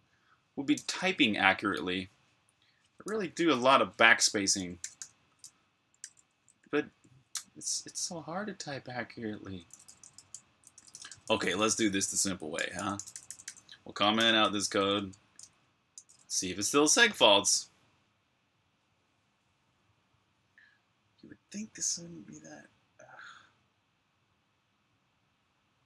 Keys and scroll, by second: 4.4-6.7 typing, 9.3-17.2 typing.